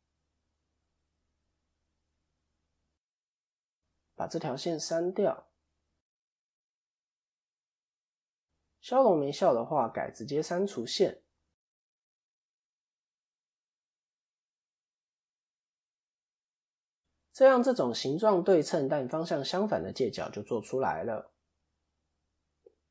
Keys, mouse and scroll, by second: 0.1-1.4 scroll up 1, 1.4-1.8 scroll up 1, 2.2 2, 3.0 click, 4.3 x, 7.4 middle click, 7.8-8.4 scroll down 5, 8.1 middle click, 8.9-9.3 scroll up 2, 9.8 scroll up 4, 9.8 x, 13.2 scroll down 5, 13.3 scroll up 1, 13.4 middle click, 13.4-15.2 scroll down 3, 14.0 middle click, 15.2 click, 15.7 middle click, 18.8 ctrl+KP_3, 20.1 KP_1, 20.5 KP_3, 21.5-22.3 scroll down 3, 22.3-22.9 scroll up 2.